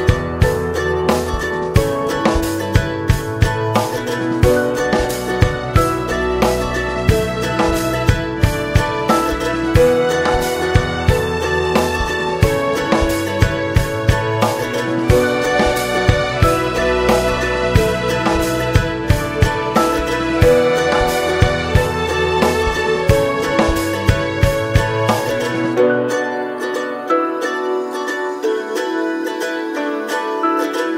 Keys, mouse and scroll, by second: 0.1-1.6 drag, 1.6 scroll down 5, 1.8-3.4 middle drag, 3.4 /, 4.2-5.0 scroll down 2, 5.0 click, 5.3 middle click, 5.9-6.2 shift+scroll up 2, 6.2 middle click, 6.4 ctrl+s, 6.7 shift+middle click, 7.5-14.2 drag, 14.2 middle click, 15.1 space, 15.7 space, 16.5 click, 16.9 click, 17.3-21.5 drag, 22.1 click, 22.3 space, 22.9 space, 23.8 click, 24.2 click, 25.0-25.5 scroll down 10, 26.6-27.7 drag, 27.7 scroll down 1, 28.3-28.8 scroll up 3, 29.9-30.9 drag.